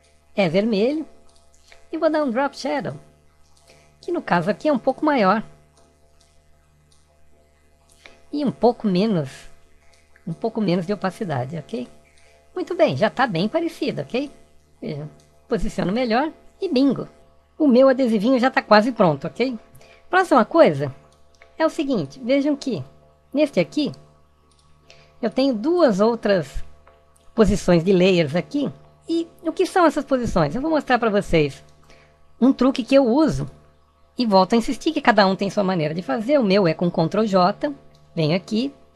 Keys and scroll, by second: 36.5 ctrl+j.